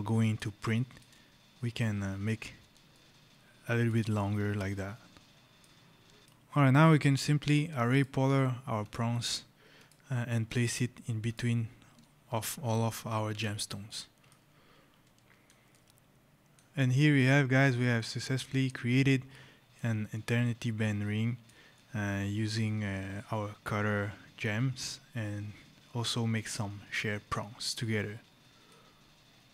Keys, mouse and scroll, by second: 0.6 shift+right click, 2.8 shift+click, 4.4 right click, 4.6 click, 6.2 right click, 7.8 shift+click, 11.1 click, 13.1 Escape, 13.7 right click, 15.6 right click, 16.6 scroll, 17.8 right click, 18.2 scroll, 18.8 right click, 20.0 right click, 24.4-24.7 scroll, 24.7 right click, 25.2-25.6 scroll, 25.8-26.4 scroll, 28.7 scroll.